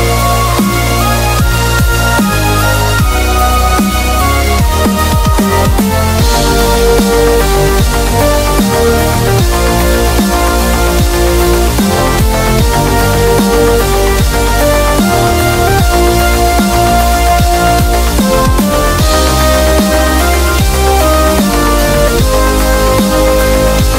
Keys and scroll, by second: 6.0 super+=, 6.1 super+=, 8.5-9.3 typing.